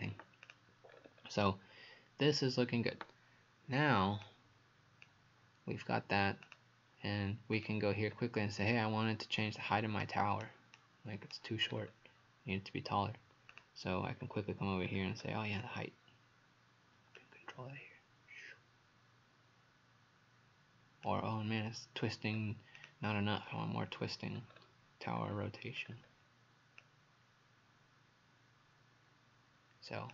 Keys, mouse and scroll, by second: 0.9-1.4 scroll down 4, 2.4-2.7 scroll up 1, 4.3 click, 8.1-8.5 scroll up 2, 10.1 right click, 11.7-13.5 scroll down 4, 13.5 click, 14.2-14.5 scroll down 2, 14.9-15.4 scroll up 4, 17.2 click, 22.4 Page_Up, 22.8 click, 23.3-23.7 scroll down 4, 24.4-25.2 scroll up 2, 25.2-25.8 scroll down 1, 25.8-26.8 scroll up 4, 26.8 click.